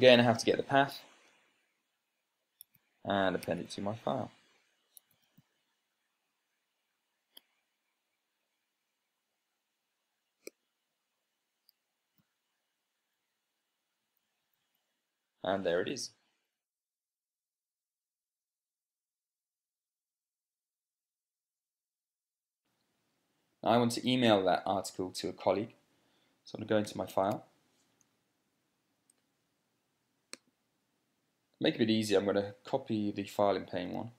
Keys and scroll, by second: 0.8-1.7 typing, 2.0 Return, 3.3-4.0 typing, 4.3 Tab, 5.3-6.6 typing, 8.3 Return, 13.0 ctrl+p, 14.9 Down, 15.1 Down, 15.3 Down, 15.4 Down, 22.8 super+space, 27.6 ctrl+p.